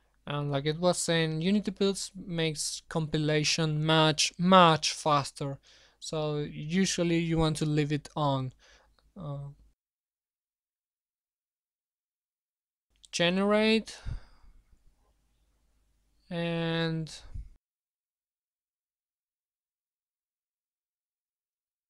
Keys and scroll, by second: 17.4 alt+Up, 17.7 alt+Up, 18.2 alt+Up.